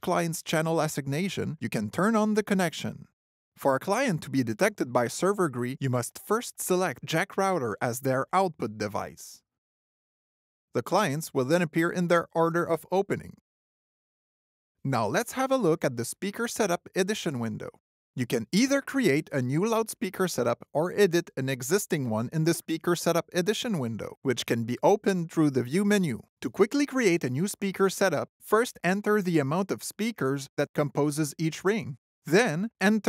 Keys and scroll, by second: 19.3 alt+w.